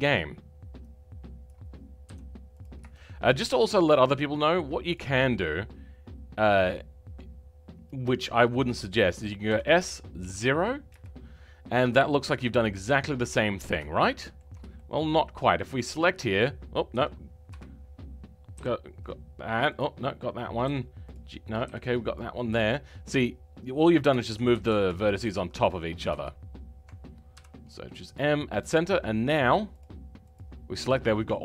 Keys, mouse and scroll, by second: 0.0 m, 1.4 click, 2.6 m, 2.9-4.9 shift+middle drag, 4.9 click, 12.4-12.8 scroll up 1, 12.8-15.7 middle drag, 15.7 click, 16.0-16.9 scroll up 2, 16.9 g, 24.5 ctrl+z, 28.1 m, 30.3 click.